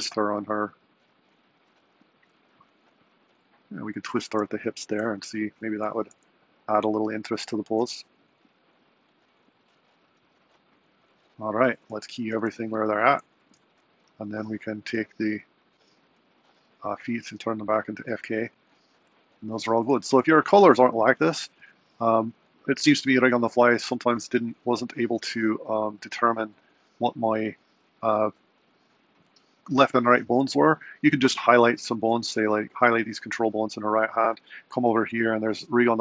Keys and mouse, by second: 5.3 super+Down, 6.0 g, 11.9 a, 12.2 i, 15.5 click, 18.7 drag, 25.0 super+Down, 26.0 click, 27.6 super+Right.